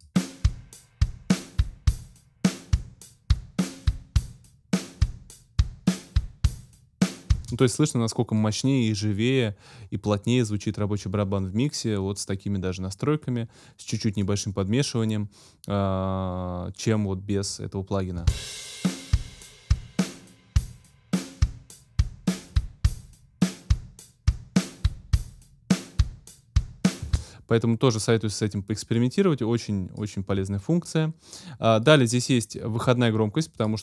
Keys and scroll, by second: 7.3 space, 18.2 space, 27.0 space.